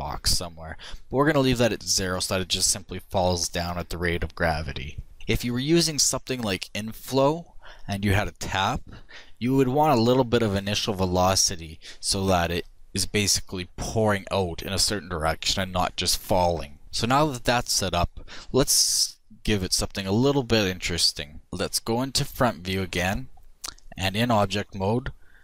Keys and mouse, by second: 1.0-3.0 drag, 21.4 KP_1.